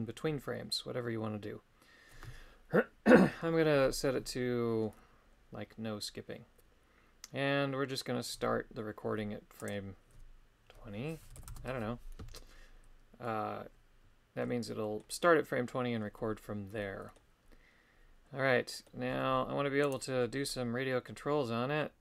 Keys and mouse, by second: 9.6-11.5 drag, 14.8 middle click, 16.8 middle click, 18.7 middle click, 19.8 right click, 20.6 middle click.